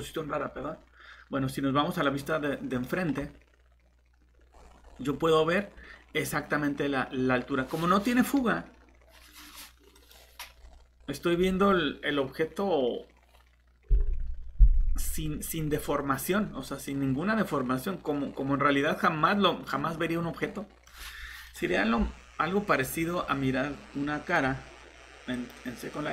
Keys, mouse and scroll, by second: 2.0 click, 4.5 scroll down 1, 4.8-6.8 scroll up 1, 9.9 click, 10.5 scroll down 1, 11.0-12.2 scroll up 1, 16.9 middle click, 21.4 click, 22.8 typing.